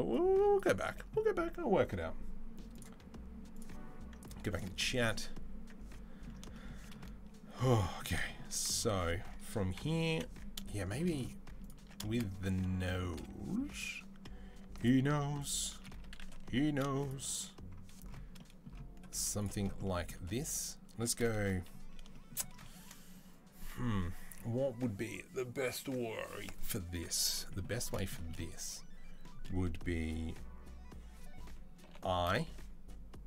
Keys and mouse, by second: 8.0 shift+drag, 8.2-10.4 middle drag, 9.6 KP_3, 9.9 KP_1, 10.4-10.8 shift+drag, 10.8 middle click, 10.9-13.5 middle drag, 11.6 Tab, 12.6 3, 13.5 alt+right click, 13.6 alt+middle click, 14.4 alt+shift+right click, 14.5-15.6 alt+shift+drag, 15.6-16.8 middle drag, 16.2 1, 16.8 click, 16.9-33.2 middle drag, 18.9 z, 31.6 i.